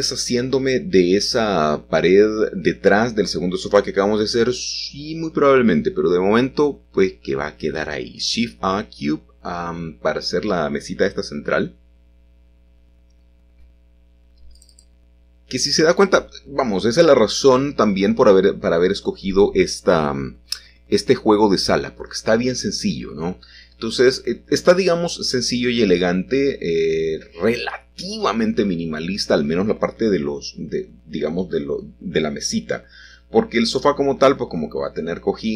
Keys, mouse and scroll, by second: 0.0 click, 1.3-2.5 scroll up 1, 4.8 shift+a, 5.6 click, 6.7 g, 7.2 shift+z, 10.1-11.2 drag, 12.6 s, 14.3-15.4 drag, 16.0 s, 16.2 x, 19.8-20.9 drag, 21.1 g, 21.6 x, 23.0 click, 26.1-26.5 typing, 27.8 click, 32.0-32.5 typing, 33.6 click, 34.2 s, 34.4 z.